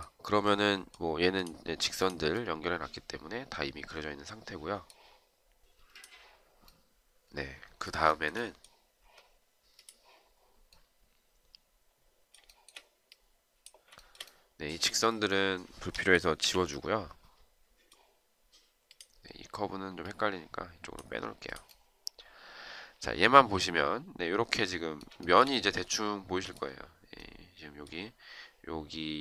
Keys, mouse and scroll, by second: 7.9 shift+right click, 12.4 shift+right click, 13.9 shift+right click, 16.4 Delete, 25.2 shift+right click.